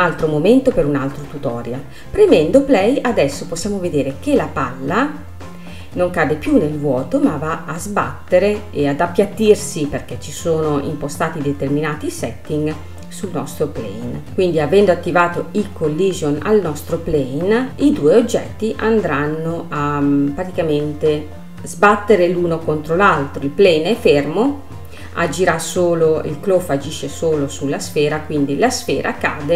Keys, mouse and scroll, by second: 2.0 space, 4.5 space, 5.1-6.0 scroll up 3, 6.0 scroll up 2, 6.3-6.7 scroll down 2, 6.7-9.9 middle drag, 9.9-13.2 drag, 14.2-17.3 middle drag, 17.3 space, 17.9-20.9 middle drag, 21.5 space.